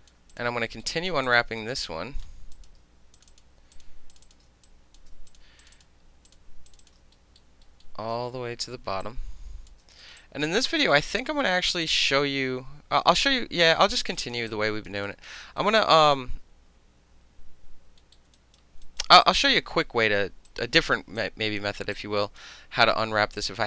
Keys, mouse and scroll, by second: 0.1 alt+middle click, 0.3 click, 0.4 alt+middle click, 0.8 alt+middle click, 0.9 alt+right click, 1.1 alt+middle click, 1.2 alt+click, 1.3 alt+middle click, 1.6 alt+right click, 2.5 click, 3.1 shift+click, 3.7 shift+click, 4.1 shift+click, 4.2 shift+middle click, 4.2 shift+click, 4.3 alt+shift+middle click, 4.6 alt+click, 5.0 alt+middle click, 5.3 shift+click, 5.4 shift+middle click, 5.6 shift+click, 5.7 shift+middle click, 5.7 shift+click, 5.8 shift+middle click, 6.3 shift+click, 6.3 shift+middle click, 6.7 shift+click, 6.7 shift+middle click, 6.8 shift+click, 6.9 alt+shift+middle click, 7.4 alt+middle click, 7.8-9.0 alt+middle drag, 9.0-9.7 shift+drag, 9.7-10.0 alt+shift+middle drag, 10.0 alt+right click, 10.1 alt+middle click, 10.2 alt+click, 10.4 alt+middle click, 10.8 alt+middle click, 10.9 alt+right click, 11.0 alt+middle click, 11.4 alt+middle click, 11.6 alt+right click, 11.7 alt+middle click, 11.8-13.8 alt+drag, 13.8 alt+middle click, 14.1 alt+middle click, 14.2 alt+click, 14.3 alt+middle click, 14.5 alt+click, 14.9 alt+middle click, 15.0 alt+click, 15.2 alt+middle click, 15.6 alt+middle click, 15.8 alt+click, 18.5 alt+right click, 18.8 alt+right click, 19.1 alt+middle click, 19.2 alt+click, 19.6 alt+middle click, 20.5 alt+click, 20.9 alt+middle click, 21.2 alt+click, 21.6 alt+middle click, 21.9 alt+click, 22.4-23.6 alt+middle drag.